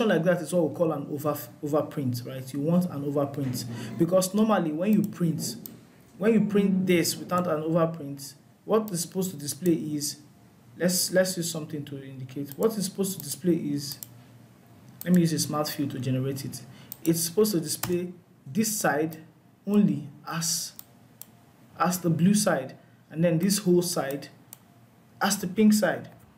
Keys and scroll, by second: 25.4 ctrl+z.